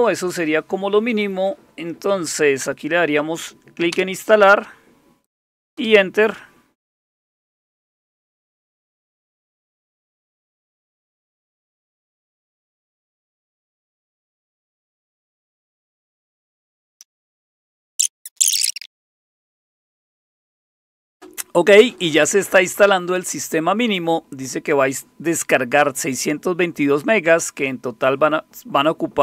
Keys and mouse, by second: 3.9 Return, 5.8 Return.